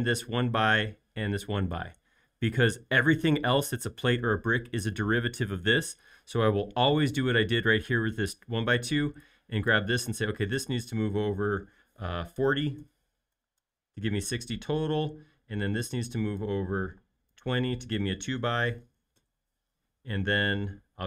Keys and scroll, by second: 10.4 m, 12.5-13.3 typing, 13.5 Return, 14.7 space, 16.8 m, 18.6-20.2 typing.